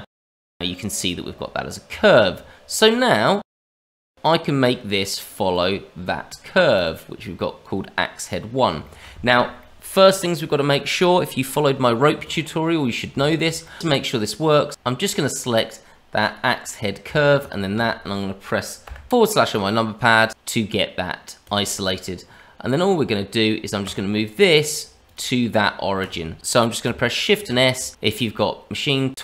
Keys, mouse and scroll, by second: 0.2 Tab, 0.3 middle click, 1.9 Tab, 3.2 click, 3.8 click, 4.6 click, 5.5 click, 6.7 click, 7.7-8.2 scroll down 2, 8.2 middle click, 8.8 shift+middle click, 9.5 middle click, 11.9 middle click, 13.2 shift+middle click, 13.6 middle click, 14.7 shift+click, 15.0 click, 16.2 click, 17.4 shift+click, 21.4 click, 21.8 middle click, 22.6 click, 23.8 click, 24.3 middle click, 25.0 click, 25.9 click, 27.3 shift+s.